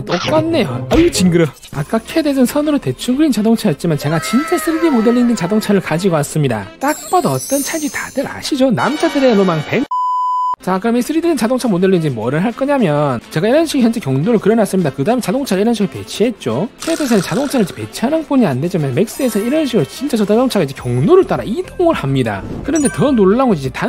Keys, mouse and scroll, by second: 2.2 click, 3.0-9.8 alt+middle drag, 10.5 click, 12.4 click, 13.9 click, 23.2-23.8 drag.